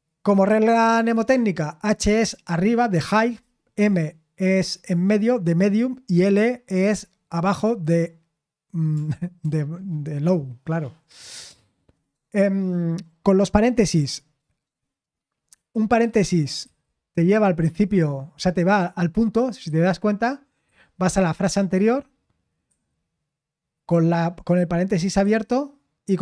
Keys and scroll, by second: 9.4 typing, 16.0-17.6 typing, 19.6 typing, 22.4-23.1 typing, 25.2 typing.